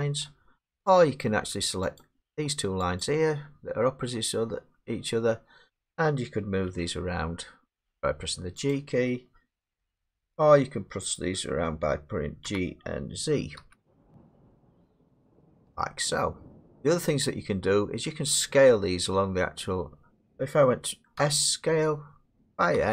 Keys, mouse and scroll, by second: 0.9 click, 2.0 click, 3.0 shift+click, 6.7 g, 8.7 click, 9.7 ctrl+z, 9.7 click, 12.4 g, 13.6 z, 16.7 ctrl+z, 16.7 click, 21.2 s, 22.8 x.